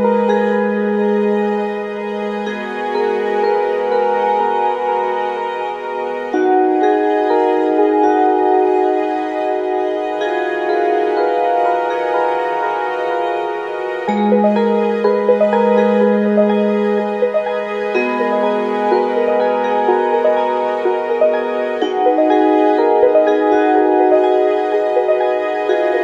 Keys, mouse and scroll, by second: 7.2-8.7 drag, 14.0 click, 16.0-19.5 drag, 19.5 r.